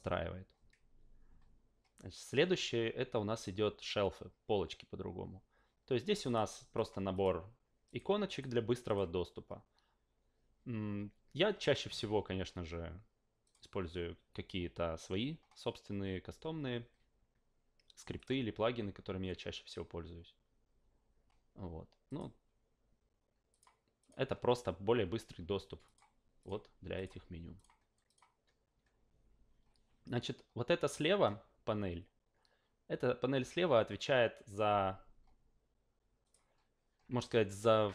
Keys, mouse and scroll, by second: 6.2 click, 6.7 click, 7.1 click, 7.9 click, 8.3 click, 8.8 click, 13.4 click, 18.1 click, 22.1 click, 23.5 click, 24.0 click, 25.8 click, 26.4 click, 26.9 click, 27.5 click, 28.1 click, 36.2 click, 37.2 alt+middle click.